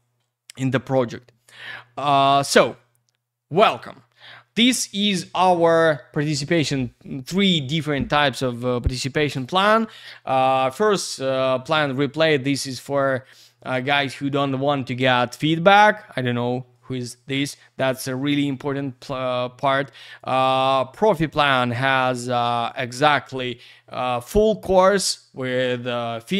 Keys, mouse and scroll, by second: 1.0 scroll down 1, 3.9-26.3 scroll down 1.